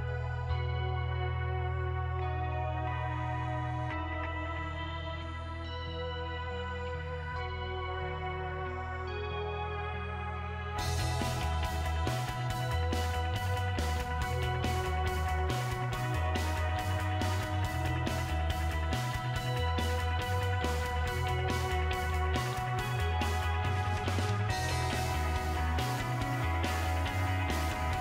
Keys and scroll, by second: 6.6 typing, 8.5-10.0 typing, 11.4-15.4 typing, 16.5-18.7 typing, 19.9-24.1 typing, 25.6 BackSpace, 26.1 3.